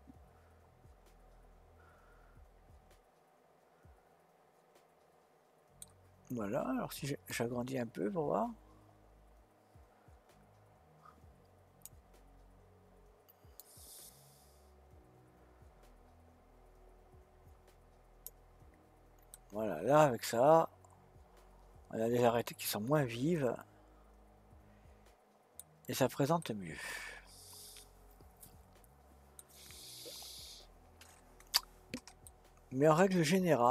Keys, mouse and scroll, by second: 7.3-10.3 drag, 13.6-16.7 drag, 19.3-22.5 middle drag, 25.7-26.4 scroll down 2, 26.4-29.4 middle drag, 32.2-33.7 middle drag.